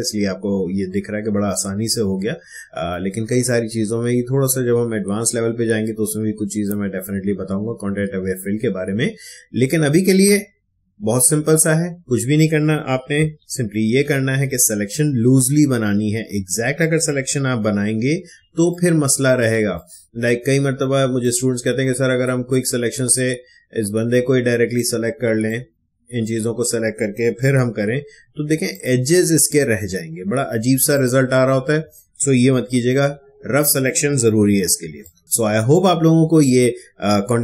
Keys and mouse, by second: 13.4 ctrl+alt+z, 16.9 ctrl+alt+z, 17.4 ctrl+d, 18.3 space, 18.7-27.4 ctrl+drag, 27.4 shift+BackSpace, 28.7 click, 32.4 ctrl+alt+z, 34.8 ctrl+space, 35.0 ctrl+click.